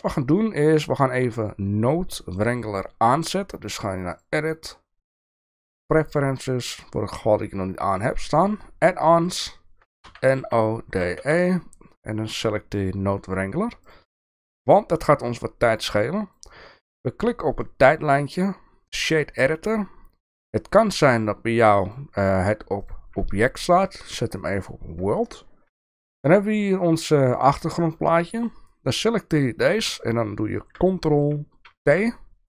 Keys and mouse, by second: 4.3-6.1 drag, 16.3-19.0 drag, 21.9-22.9 drag, 23.9-24.7 drag, 26.0 shift+middle click, 26.7 click, 28.5-29.5 drag, 31.8 ctrl+t.